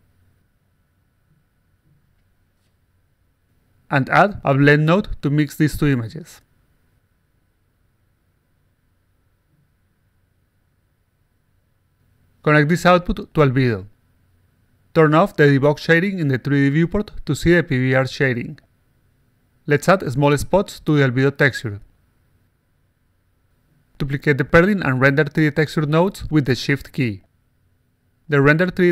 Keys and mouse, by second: 1.6 click, 1.9 click, 2.2 click, 2.6 click, 3.9 click, 4.4 click, 5.3 click, 6.3-7.4 drag, 8.0 click, 9.9 click, 10.7 click, 11.3 click, 12.6 click, 14.7 click, 15.3 click, 16.0 click, 16.6 click, 17.3 click, 18.2-19.2 drag, 22.8-23.8 alt+drag, 24.5 click, 25.1-27.3 shift+drag, 27.9 click.